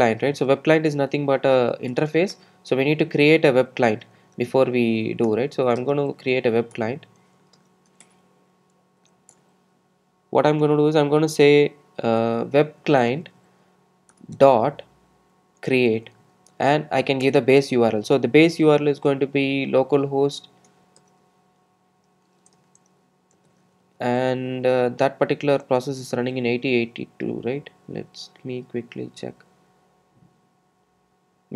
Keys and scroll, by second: 2.0 Return.